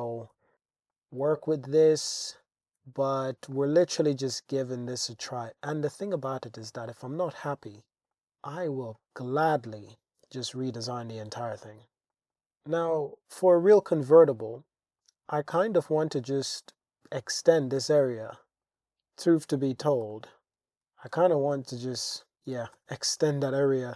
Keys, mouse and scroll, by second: 0.9 shift+drag, 2.1 shift+click, 2.9 alt+z, 3.5-5.8 middle drag, 6.6 middle click, 7.0-7.4 middle drag, 7.7-8.1 shift+middle drag, 8.1 Tab, 8.1 middle click, 10.4 shift+click, 10.9 shift+scroll, 11.0 shift+click, 12.1 shift+click, 15.0 click, 15.9 Tab, 16.7 click, 17.5-20.0 typing, 19.2 click, 21.2 super+r, 21.4 click, 22.1 Tab, 22.8 Tab, 23.1 click.